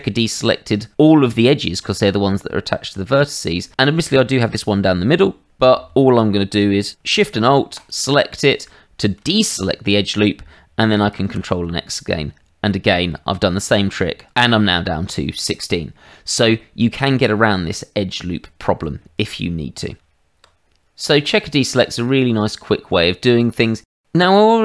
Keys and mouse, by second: 11.2 ctrl+x, 12.7 middle click, 16.5 middle click, 19.9 Tab, 21.8 Tab, 22.7 shift+middle click, 23.7 shift+middle click.